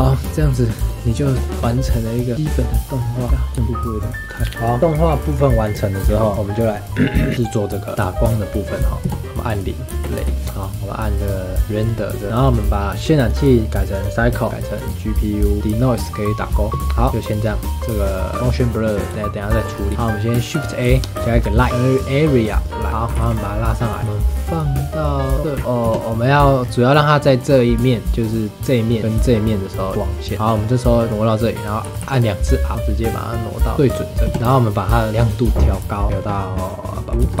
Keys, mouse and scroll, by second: 0.8 click, 1.2-2.0 shift+middle drag, 2.0-3.3 scroll up 5, 2.1 middle drag, 3.3 scroll down 3, 3.5 space, 3.6 click, 4.5-6.0 middle drag, 7.9-9.0 shift+middle drag, 9.0 KP_0, 9.9 space, 11.9 click, 12.3 click, 13.2-14.5 drag, 15.2-16.0 drag, 16.7 click, 19.4-19.7 shift+middle drag, 19.7 scroll up 2, 19.9-20.8 scroll down 1, 20.8 shift+a, 22.9 scroll down 4, 23.0 g, 24.7-25.3 middle drag, 25.3 g, 25.8 KP_0, 26.3-28.0 scroll up 6, 28.0-29.0 scroll up 1, 29.9-30.3 scroll down 5, 30.3-31.8 middle drag, 31.8 r, 33.9-34.2 middle drag, 34.2 KP_0, 34.3-35.3 scroll up 1, 35.3 click, 36.1-37.4 drag.